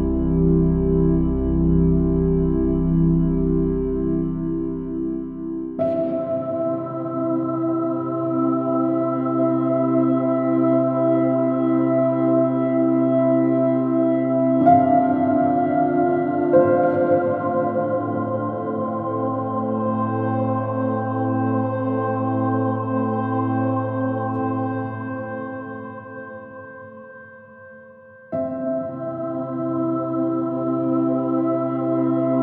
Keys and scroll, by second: 2.5 space, 10.9 space, 17.4 space, 19.9 space, 28.3 space, 32.1 space.